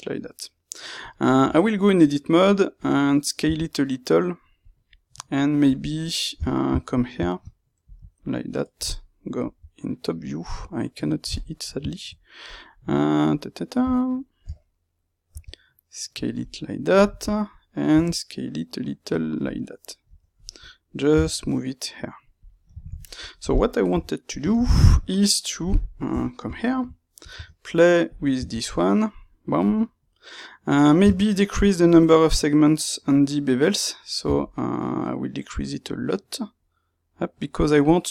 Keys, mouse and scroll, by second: 1.0 click, 1.4 Tab, 1.8 middle click, 3.4 s, 6.4 Tab, 6.4-12.4 middle drag, 6.9 shift+click, 7.8 KP_Divide, 9.3 KP_7, 12.4 click, 12.7-13.8 middle drag, 14.4 Tab, 15.3 s, 16.3 middle click, 17.8 s, 19.4 middle click, 20.1 Tab, 21.1 g, 22.4 click, 22.7 ctrl+middle click, 23.8 KP_3, 24.7 KP_Divide, 25.4 middle click, 26.0 KP_3, 26.6 shift+middle click, 28.1 space, 29.9 middle click.